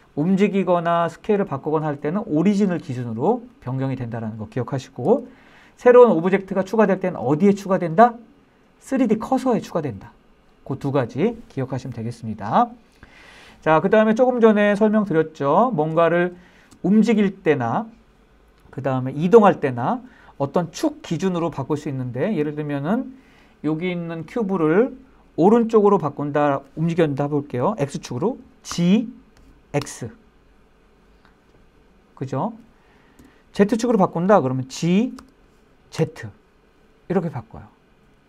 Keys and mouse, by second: 4.6 Escape, 14.6-15.4 shift+middle drag, 15.6 shift+middle drag, 16.4-16.8 shift+middle drag, 21.9 shift+middle click, 28.3 g, 29.4 x, 32.8 Escape, 34.8 g, 35.6 z.